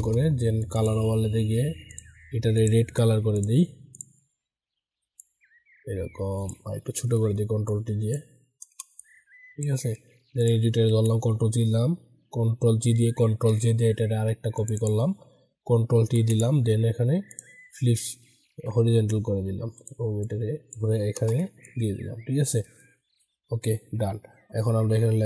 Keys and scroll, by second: 6.9 ctrl+t, 10.8 ctrl+g, 13.2 ctrl+j, 15.9 ctrl+t.